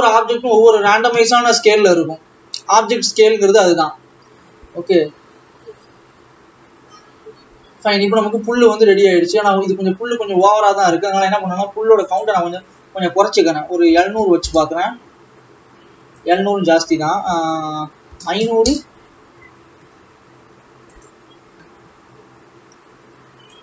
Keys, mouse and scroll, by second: 3.8-6.7 drag, 11.0-11.6 scroll up 6, 11.6-12.1 scroll up 5, 12.1-12.8 scroll up 3, 13.1-14.9 drag, 14.9 KP_0, 17.1-19.0 drag, 19.0 KP_0, 21.7 click.